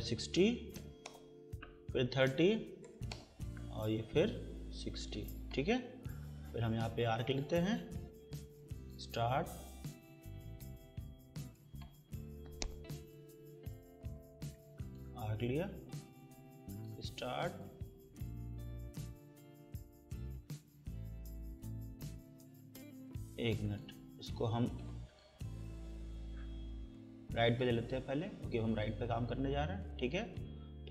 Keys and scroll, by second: 0.3-1.3 typing, 2.4-3.4 typing, 5.8 Escape, 13.2 Escape, 22.8 Escape, 25.7 Delete.